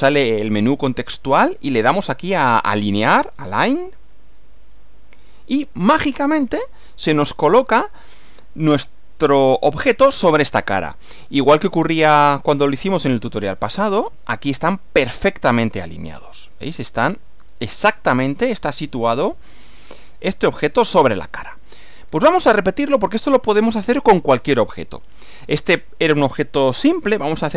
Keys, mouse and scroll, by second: 4.3 click, 6.1 click, 6.8-7.9 middle drag, 10.5 middle click, 11.5-12.9 middle drag, 13.8 click, 14.6 click, 15.4-19.2 middle drag, 21.5 click, 22.7 click, 23.6-25.5 middle drag.